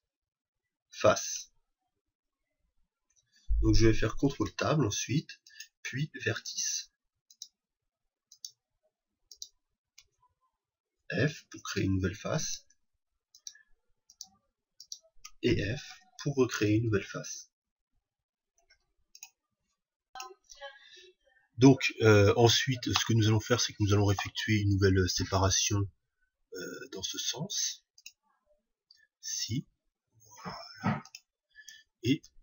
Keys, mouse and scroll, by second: 4.3 ctrl+Tab, 6.3-11.1 right drag, 6.7 shift+r, 11.2 f, 12.5-16.6 right drag, 12.7 shift+r, 15.9 shift+f, 23.4-25.4 middle drag, 25.7 ctrl+r, 31.6-32.4 drag.